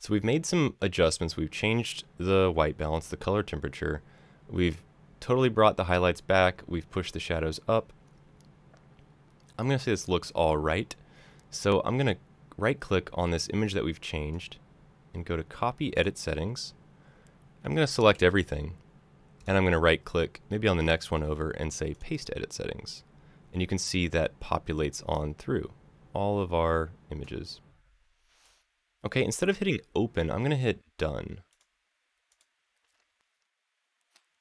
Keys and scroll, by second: 17.8 ctrl+a.